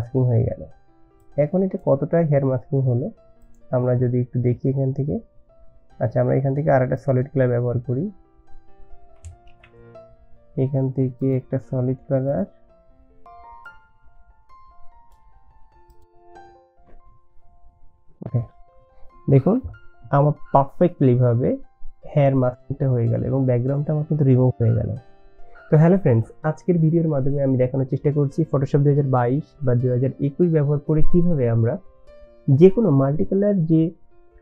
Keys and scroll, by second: 9.5 ctrl+z.